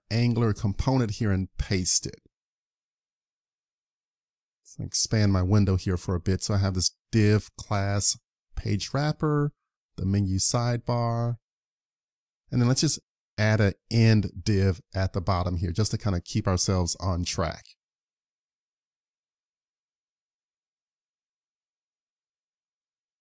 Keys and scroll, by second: 0.1 super+Tab, 1.8 super+v, 18.6 super+s.